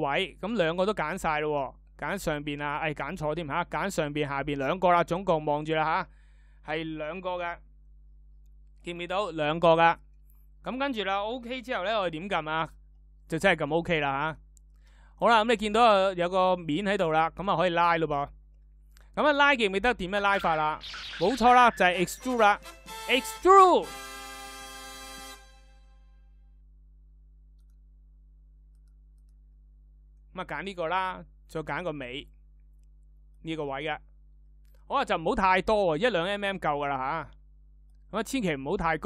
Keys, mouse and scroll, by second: 20.1 e.